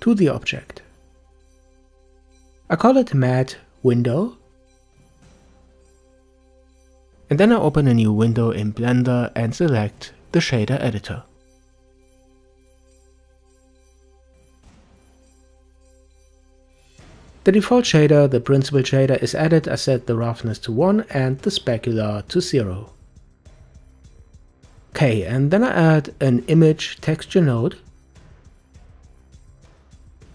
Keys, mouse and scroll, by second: 10.8-14.0 drag, 14.6 n, 16.3-17.6 shift+middle drag, 17.6-18.3 scroll up 1, 18.3-19.8 scroll up 6, 19.8-24.1 drag, 24.1-25.4 middle drag, 25.4 shift+a.